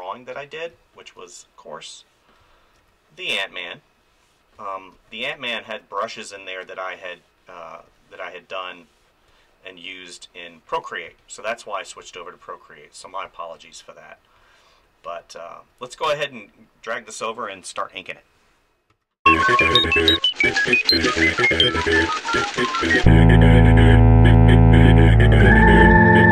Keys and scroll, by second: 2.4 space, 2.8 ctrl+z, 4.5 space, 4.9 ctrl+z, 5.4 [, 7.8 ctrl+z, 9.3 space, 11.0 space, 18.9 ctrl+s.